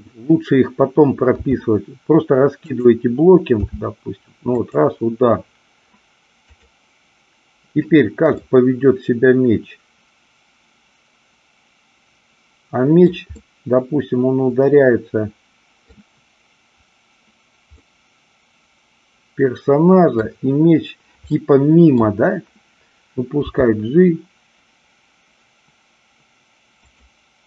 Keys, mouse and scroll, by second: 1.4 r, 2.6 click, 3.6 g, 4.6 click, 6.4 click, 8.3-13.2 middle drag, 13.4-15.9 middle drag, 17.8-20.3 middle drag, 21.3-22.0 middle drag, 23.4 g, 26.8 click.